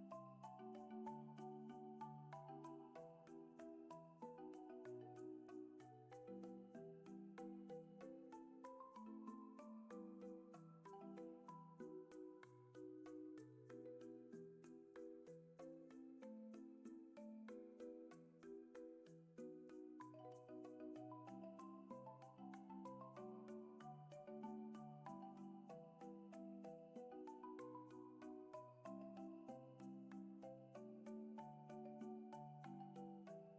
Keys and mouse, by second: 2.4-4.2 drag, 5.1-7.1 drag, 8.3-10.8 drag, 11.6-13.0 drag, 20.0-21.8 drag, 22.8-23.4 shift+middle drag, 27.1-33.5 drag.